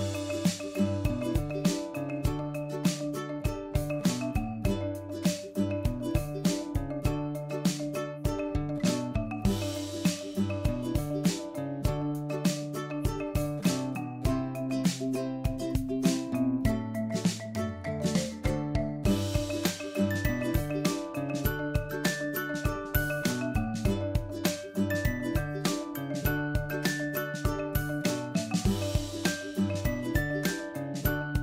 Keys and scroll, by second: 7.1 Left, 13.0 Right, 21.6 Left, 23.1 Right, 27.8 Left, 29.6 Right.